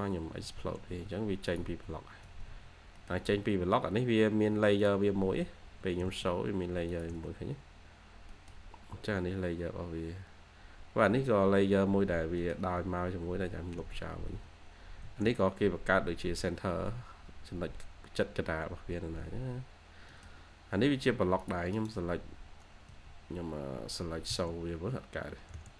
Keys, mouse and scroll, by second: 2.2 Escape, 2.4 Escape, 2.5-2.9 scroll down 1, 2.9 middle click, 3.4-3.8 scroll up 1, 5.2 Escape, 5.7 1, 7.4-7.7 scroll down 1, 7.7 scroll, 8.0 1, 8.2 middle click, 8.8-9.5 scroll up 1, 12.1 scroll down 1, 12.3 middle click, 12.5 Escape, 13.4 1, 14.2 Escape, 14.9 2, 16.4-16.8 scroll down 1, 16.8 2, 17.3-17.6 scroll down 1, 17.6 2, 19.4 scroll up 1, 20.0 middle click, 20.6-21.6 scroll up 1, 21.6 right click, 22.8 Escape, 23.7 scroll down 1, 24.1-25.0 typing, 24.6 scroll down 1.